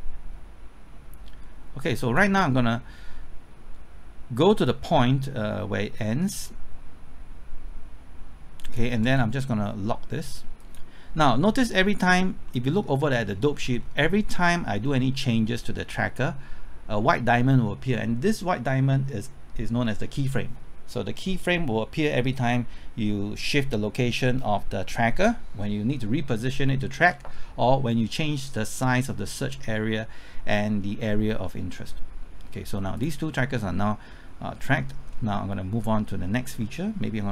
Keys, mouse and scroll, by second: 12.2-12.5 scroll up 1, 12.5 middle click, 13.0-13.8 scroll up 1, 32.9 click, 33.6-34.1 scroll down 1, 34.1 scroll up 1, 35.1-36.5 middle drag.